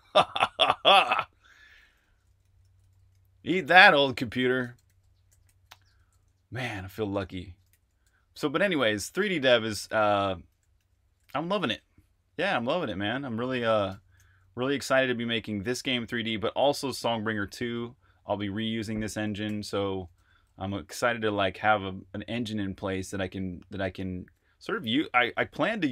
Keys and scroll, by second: 1.0-11.2 typing, 13.8 Escape, 14.2 typing, 19.4 k, 20.1 Return.